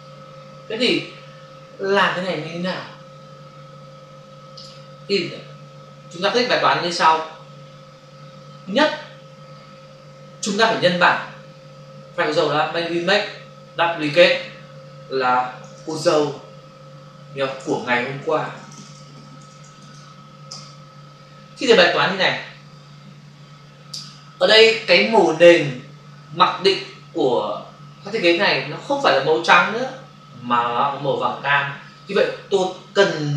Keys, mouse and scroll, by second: 12.9 click, 14.0 click, 15.6-19.9 typing, 20.4 shift+Return.